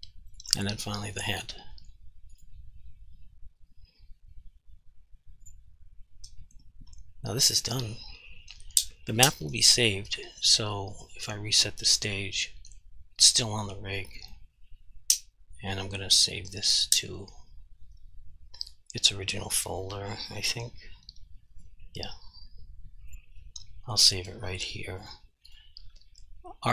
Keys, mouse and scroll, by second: 0.7 r, 1.3 right click, 2.4 click, 5.5 click, 11.3 click, 23.1 click.